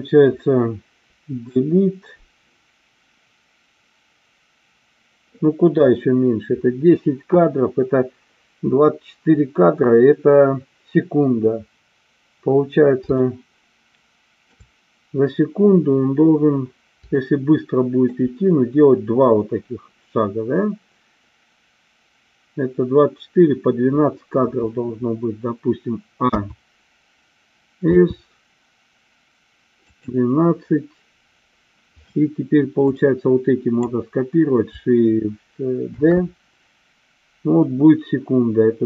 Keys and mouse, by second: 1.1 Delete, 13.3-14.6 shift+middle drag, 17.1 shift+middle click, 26.2 a, 28.1 s, 32.9-33.8 drag, 36.0 shift+d.